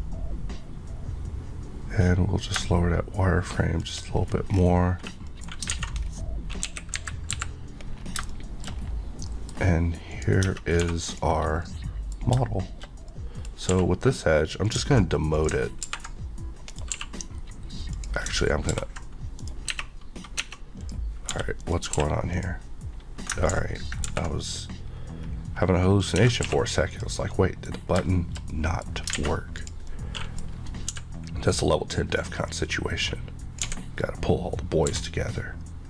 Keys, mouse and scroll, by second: 2.4 click, 4.1 scroll down 1, 5.2 middle click, 5.7 alt+a, 6.0-6.6 scroll down 1, 6.6 KP_1, 6.9 KP_3, 7.3 KP_5, 8.0 scroll down 1, 8.2 shift+middle click, 8.7 scroll down 1, 9.2 middle click, 9.5 scroll up 1, 10.1 click, 10.4 Tab, 10.8 2, 11.1 click, 11.5 scroll down 1, 11.6 middle click, 13.5 scroll up 1, 13.7 q, 14.6 click, 15.8 ctrl+b, 16.7 right click, 16.9 q, 17.9 click, 18.7 ctrl+b, 19.3 right click, 19.7 Tab, 20.8 click, 21.3 g, 21.6 right click, 22.0 q, 22.3 click, 24.0 ctrl+b, 24.9 scroll up 1, 26.0 click, 26.1 Tab, 26.4 q, 26.9 click, 27.3 middle click, 27.8 scroll down 1, 28.0 shift+middle click, 28.5 middle click, 29.1 a, 29.6 click, 29.8 middle click, 30.5 scroll up 1, 30.9 d, 31.5 click, 33.6 x, 34.9 e.